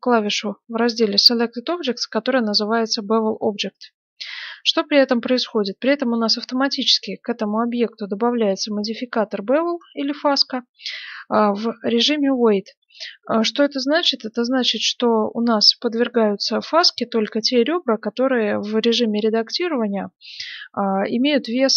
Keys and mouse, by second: 3.4-18.2 drag, 18.6-21.7 middle drag.